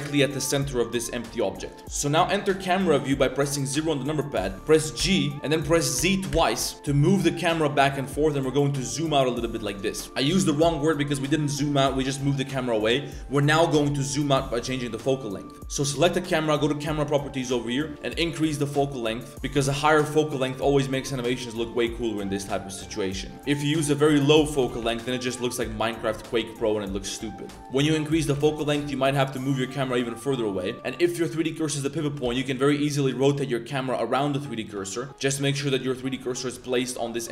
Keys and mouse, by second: 1.6 click, 1.8 KP_0, 15.8 click, 16.6 click, 18.1 click, 19.1 click, 20.4 middle click, 21.1 shift+click, 23.3 click, 24.1 middle click, 30.9-31.4 drag, 35.5 click, 36.5 click.